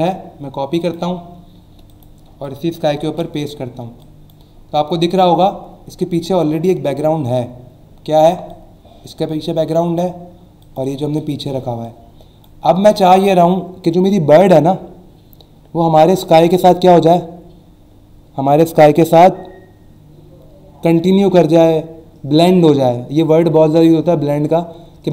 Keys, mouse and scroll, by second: 0.8 click, 1.9 click, 2.4 click, 4.0 click, 4.6 alt+scroll up 1, 5.5 alt+scroll up 1, 6.0-6.7 alt+scroll up 2, 6.9-7.5 alt+scroll down 2, 7.8 alt+scroll up 1, 8.5 click, 10.6 click, 11.1 click, 11.8 click.